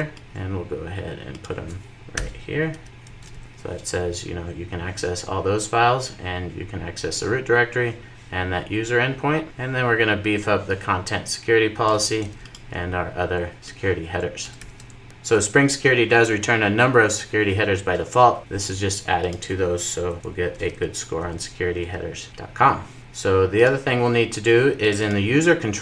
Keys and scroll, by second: 3.2 super+v, 3.4 super+s, 14.4 super+v, 15.0 super+s, 22.3 super+s.